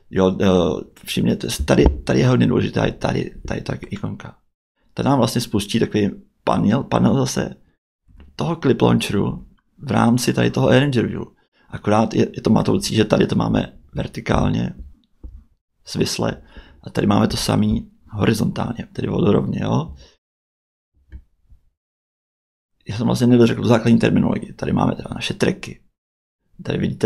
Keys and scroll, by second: 8.0 Tab, 9.2 Tab, 12.7 Tab, 16.2 Tab.